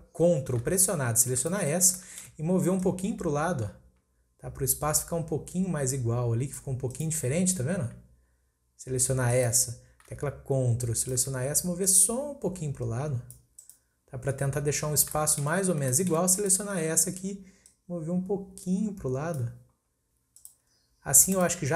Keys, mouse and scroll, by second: 1.4 ctrl+click, 1.9-2.8 shift+middle drag, 2.8 click, 6.9 click, 9.3 click, 11.0 ctrl+click, 11.9 click, 13.6 click, 15.2-16.4 shift+middle drag, 16.4 click, 16.9-17.7 scroll up 2, 17.7 click, 20.4 click, 20.7-21.3 scroll down 5, 21.3 click.